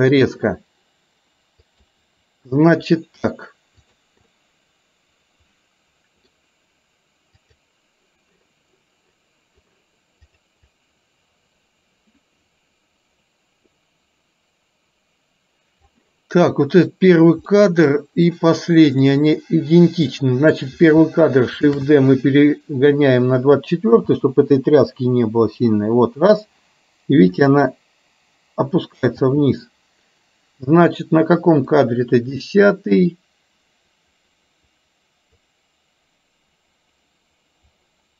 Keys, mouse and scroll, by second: 0.6 space, 1.8 click, 3.9 click, 4.3-6.4 middle drag, 7.4 click, 10.3 click, 10.9-16.0 drag, 17.5-17.9 middle drag, 18.9 click, 20.2 click, 22.4 shift+d, 24.2 space, 29.3 space, 31.8 click, 32.5-38.1 drag.